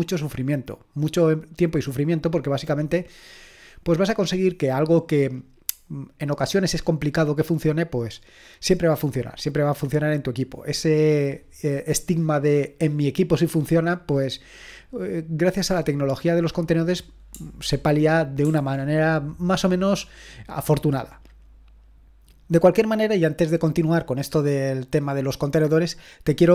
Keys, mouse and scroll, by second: 17.6 super+l, 18.4 super+l.